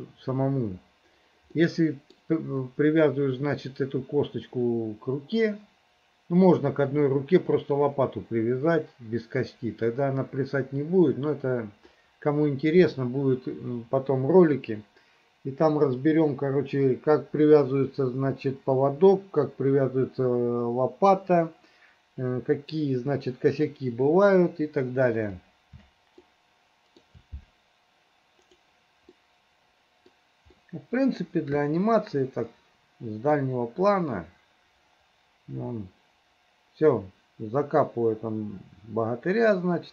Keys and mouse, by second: 1.6 middle click, 12.0 click, 12.4 middle click, 26.3 shift+middle click, 29.2-30.3 middle drag, 30.6 middle click, 32.6 middle click, 39.5-39.9 middle drag.